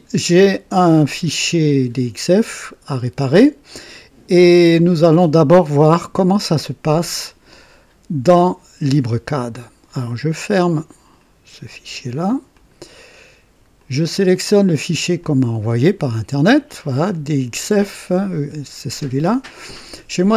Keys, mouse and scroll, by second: 10.7 click, 12.5 click, 13.8 click, 15.2 click.